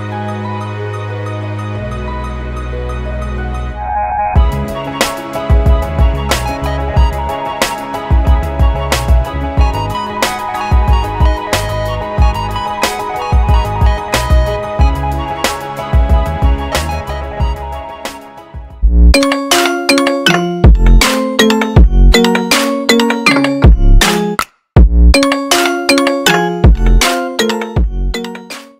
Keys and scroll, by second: 0.4 super+g.